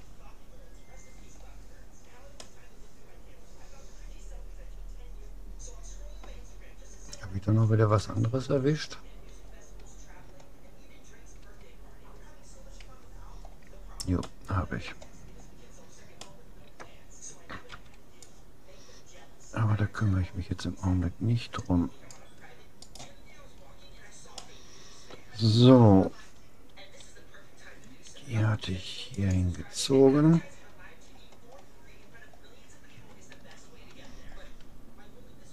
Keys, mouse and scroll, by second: 2.4-4.2 middle drag, 7.2-11.4 middle drag, 11.4 a, 13.0 a, 13.6 click, 14.2-18.0 middle drag, 17.8 c, 23.4-26.0 middle drag, 27.0 g, 31.1-32.6 middle drag, 33.0 Tab, 33.6 a, 34.3-35.5 middle drag.